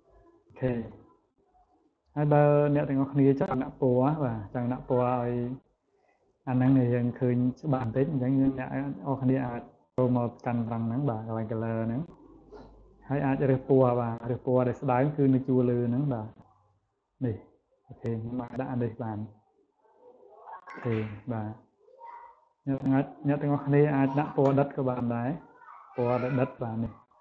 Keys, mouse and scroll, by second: 0.7 click, 1.4 click, 1.8 click, 3.0-4.2 drag, 9.5 click, 19.2 click, 20.2 click, 21.1 click, 21.7 click, 23.0-24.1 drag, 25.3 click.